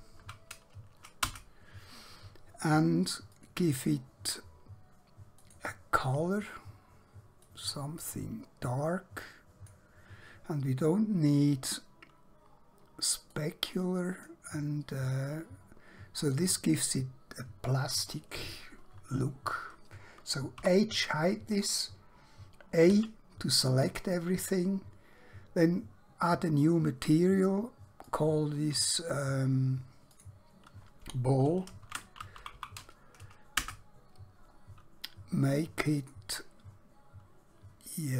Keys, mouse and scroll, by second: 0.0-0.2 typing, 1.3 Return, 3.4 click, 13.4 click, 20.5 h, 23.0 a, 26.7 click, 31.8-32.5 typing, 33.7 Return, 36.0 click.